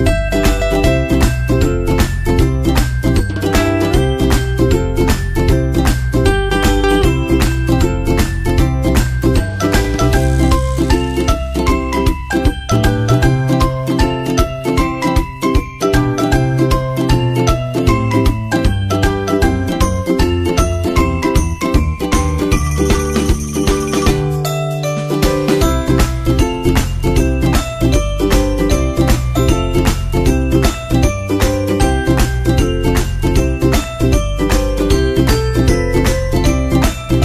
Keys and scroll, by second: 1.2 super+Tab, 2.5 super+Tab, 3.3 super+Tab, 4.9 super+Tab, 5.6 super+Tab, 25.1 super+v, 28.2 super+Tab, 29.1 super+Tab, 29.8 super+Tab, 37.0 super+Tab.